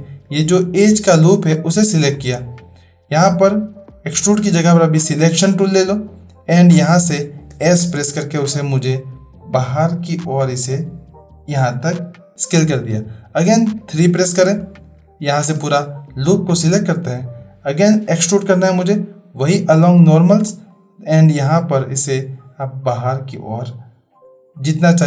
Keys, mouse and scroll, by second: 5.0 click, 7.5 s, 13.9 3, 14.6 click, 18.1-20.4 drag, 21.7-25.0 drag.